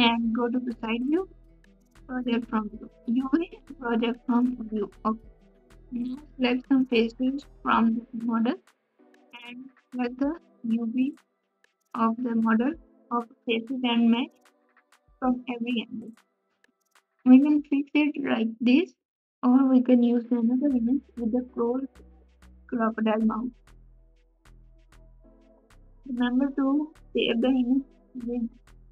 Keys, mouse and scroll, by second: 0.0 g, 18.0 g.